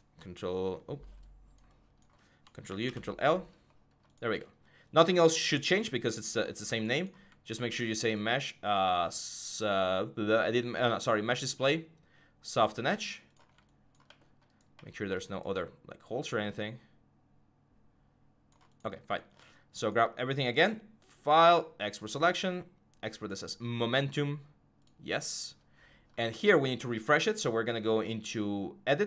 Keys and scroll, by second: 2.5 ctrl+u, 2.6 ctrl+l.